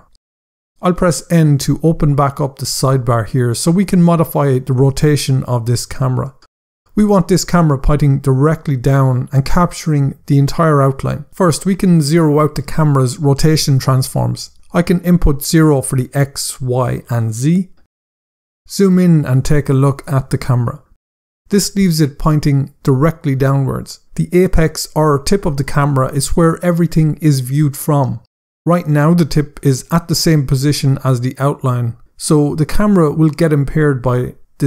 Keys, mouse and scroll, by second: 1.6 n, 9.1 scroll up 1, 9.8 middle click, 11.7-12.1 scroll down 2, 11.8 middle click, 13.5 click, 14.6-16.3 typing, 14.9 Tab, 15.4 Tab, 15.8 Tab, 16.7 Return, 18.5 scroll up 1, 19.4 scroll down 1, 19.5 middle click.